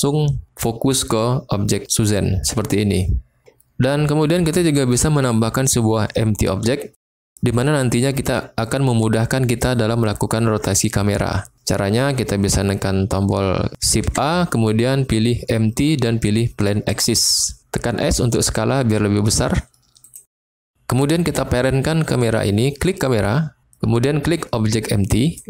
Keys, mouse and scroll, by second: 14.0 shift+a, 17.9 s, 19.9 click, 22.9 click, 25.3 shift+click.